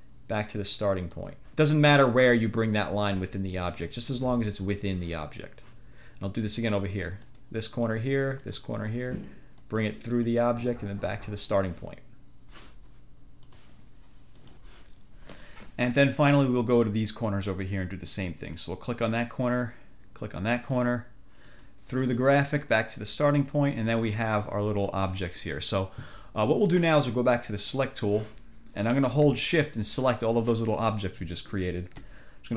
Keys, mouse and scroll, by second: 1.2 click, 7.3 click, 8.5 click, 9.2 click, 9.7 click, 10.2 click, 11.5 click, 13.6 click, 14.5 click, 19.2 click, 20.8 click, 21.6 click, 22.2 click, 23.4 click, 27.7 click.